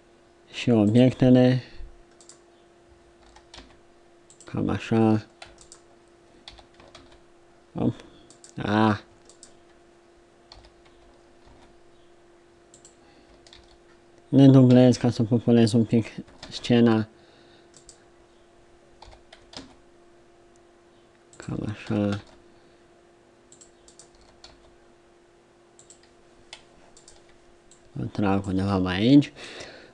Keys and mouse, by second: 0.2-2.3 drag, 3.2 r, 6.5 d, 6.9 shift+z, 10.5 g, 11.4-12.5 middle drag, 13.5 shift+d, 19.0 g, 21.9 r, 23.9-25.8 right drag, 24.1 r, 27.0 right click, 28.6 a.